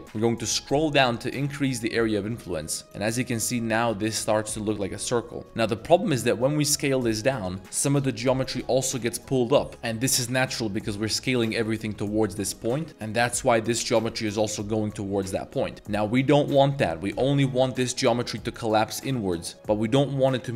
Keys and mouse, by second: 5.4 middle click, 5.9 s, 7.4 click, 9.7 s, 10.0 s, 12.7 ctrl+z, 12.9 s, 13.1 click, 15.5 middle click, 15.7 ctrl+z, 16.5 middle click.